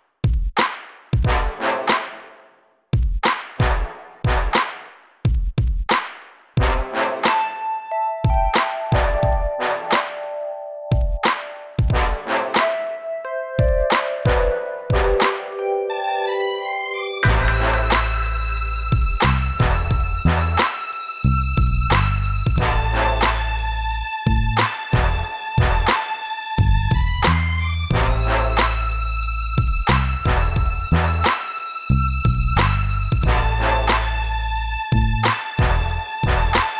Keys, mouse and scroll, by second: 1.6 click, 6.0 click, 6.2 click, 7.7 click, 9.2 b, 12.1-12.4 scroll down 2, 13.4 scroll down 1, 13.8 click, 18.4 shift+Return, 18.7 click, 20.5 Return, 22.1 click, 22.2 click, 23.7 click, 25.2 click, 25.3 click, 26.1-26.4 scroll up 1, 28.9 alt+b, 29.5 scroll down 2, 30.9 click, 31.0 click.